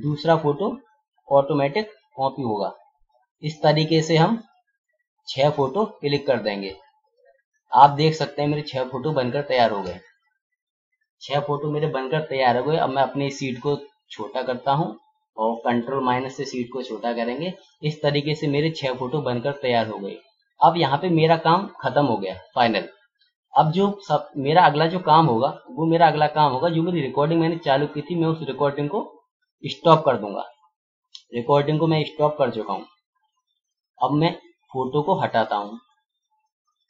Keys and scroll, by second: 15.9 ctrl+-.